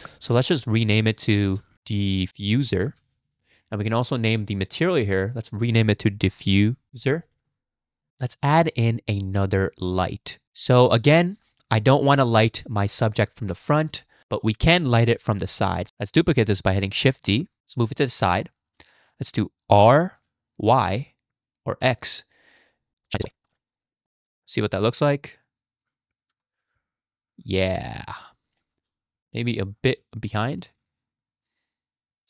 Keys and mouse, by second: 0.6-1.0 middle drag, 1.5 F2, 2.3 f, 5.2-7.5 drag, 6.9 f, 8.2 shift+click, 8.5-9.0 drag, 9.2 shift+drag, 9.9-10.6 drag, 10.8 click, 11.1 click, 14.1 shift+drag, 15.0 shift+click, 17.3 shift+d, 19.7 r, 23.0 click, 23.4 g, 23.5 click, 23.6 r, 23.7 click, 24.4 z, 26.3 KP_0, 28.0 shift+middle drag, 29.3 g, 30.9 r.